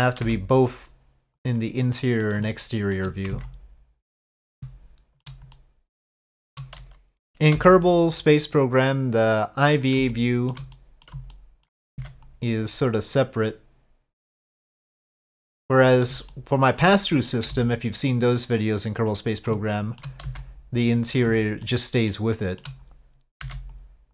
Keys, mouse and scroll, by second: 0.2 c, 1.9 middle click, 2.4 shift+middle click, 3.3 c, 4.6 shift+middle click, 5.5 middle click, 6.2 shift+middle click, 7.5 c, 10.1 shift+middle click, 10.7 middle click, 11.3 shift+middle click, 11.9 c, 16.3 shift+middle click, 17.0 middle click, 17.5 c, 19.5 shift+middle click, 20.2 c, 21.6 shift+middle click, 22.3 shift+middle click, 23.4 c.